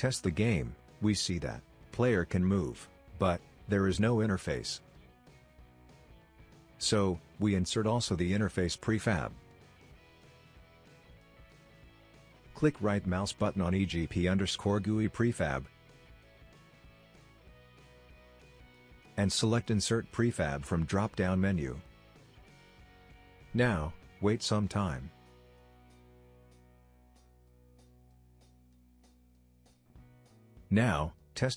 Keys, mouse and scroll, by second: 0.1-3.2 typing, 5.2 Escape, 6.2 s, 6.8 right click, 7.0 s, 7.8 middle click, 7.8 middle click, 8.0 middle click, 9.0 click, 10.0-15.2 drag, 16.9 right click, 22.5 click, 28.7 a, 29.1 right click, 29.7 F5.